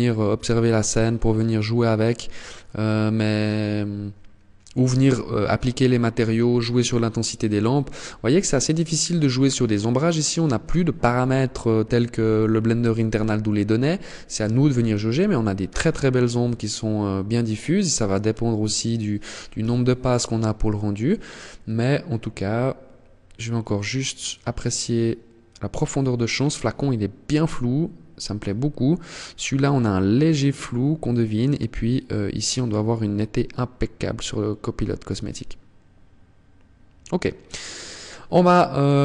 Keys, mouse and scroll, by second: 18.8 KP_0, 37.8 click, 38.9 click.